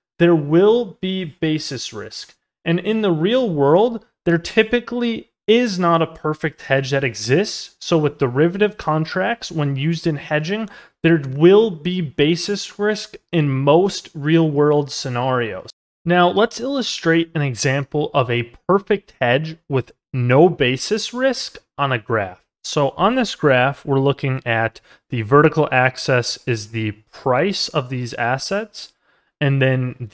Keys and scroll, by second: 2.6 ctrl+z, 28.6 ctrl+z.